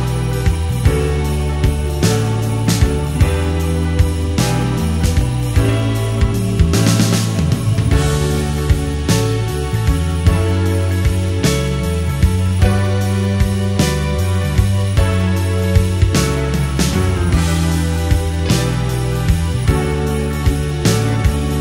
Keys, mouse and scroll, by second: 0.0 5, 0.6-1.4 middle drag, 2.3 click, 2.8 click, 4.6 click, 5.3-6.8 drag, 8.3 KP_7, 9.8 shift+middle click, 11.9 click, 12.9 g, 13.9 click, 14.5 click, 15.4 click, 15.9 g, 16.4 click, 17.2 click, 17.4 g, 17.9 click, 18.6 click, 19.5 click, 20.9 x.